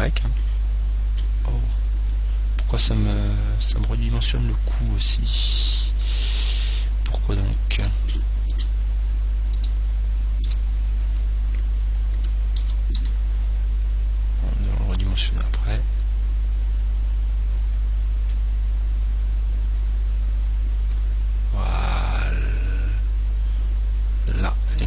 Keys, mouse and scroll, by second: 5.8-8.8 middle drag, 8.8-11.6 right drag, 11.0-13.8 middle drag, 12.8 s, 24.7 click.